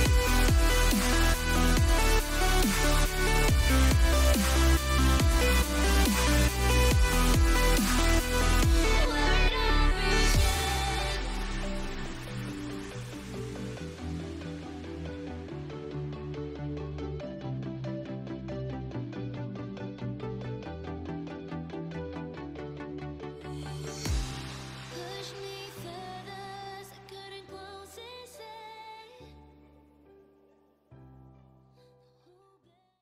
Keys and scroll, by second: 7.5 ctrl+g, 22.0 ctrl+0, 24.4 ctrl+0, 30.6 ctrl+s.